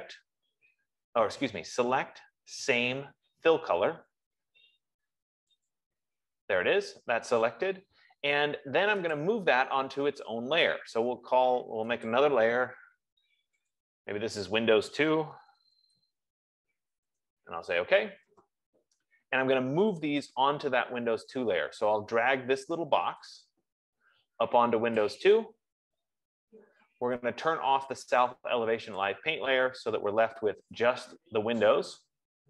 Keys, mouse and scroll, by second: 0.0 click, 6.3 click, 9.6 click, 12.6 click, 14.1 click, 15.5-16.7 typing, 17.3 Return, 25.2 click, 29.7 click.